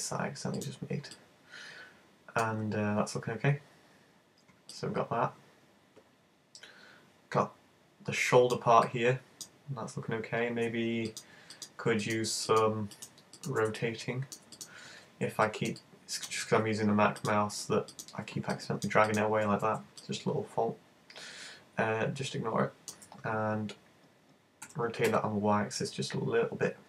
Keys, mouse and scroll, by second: 1.2 middle click, 3.5-4.0 scroll down 1, 4.0-4.8 scroll down 7, 4.8 middle click, 8.8 middle click, 9.6-10.3 scroll up 6, 11.1 right click, 11.5 shift+right click, 11.7 shift+right click, 12.1 shift+right click, 12.3 shift+right click, 12.5 shift+right click, 13.0 shift+right click, 13.4 shift+right click, 14.9 super+z, 15.5 middle click, 15.9 middle click, 17.2 shift+right click, 17.9 shift+right click, 19.5 super+z, 20.0 middle click, 24.7 r.